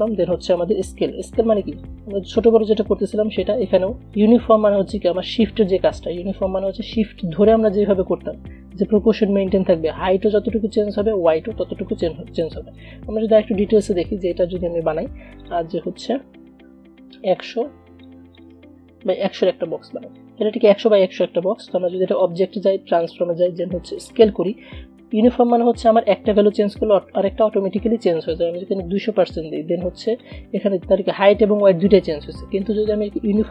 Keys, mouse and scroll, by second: 13.8 Delete, 14.6 click, 15.6 click, 18.2-30.2 drag.